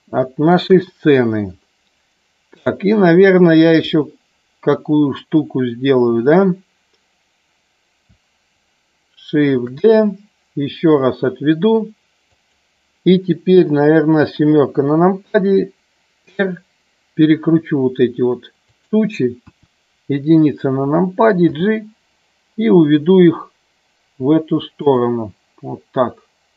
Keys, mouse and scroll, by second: 0.0 middle click, 0.6 KP_1, 2.5 click, 9.5 shift+d, 12.2 click, 14.4 KP_7, 16.1 r, 18.7 click, 19.3 KP_1, 21.5 g, 24.7 click.